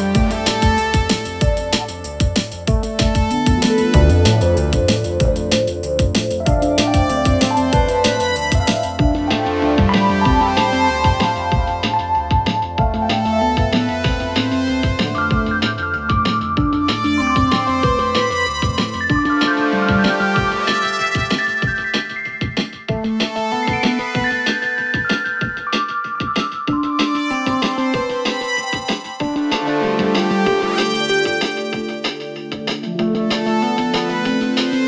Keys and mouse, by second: 0.0 click, 0.9 click, 1.7 click, 1.7 right click, 3.4 Tab, 3.7 click, 4.5 Tab, 4.8 2, 7.9 typing, 8.1 alt+click, 9.4 alt+shift+click, 14.3 alt+shift+click, 15.3 ctrl+x, 15.9-17.4 drag, 17.8 Tab, 17.9 click, 18.5 Tab, 19.1 2, 19.7 click, 20.5 ctrl+r, 21.8 1, 22.3 click, 23.2 shift+s, 25.7 click, 26.2-26.6 shift+drag, 26.2-26.6 shift+right drag, 28.0 Tab, 28.2 click, 28.2 right click, 29.0 click, 29.0 right click, 29.6 shift+a, 31.4 shift+click, 32.4 r.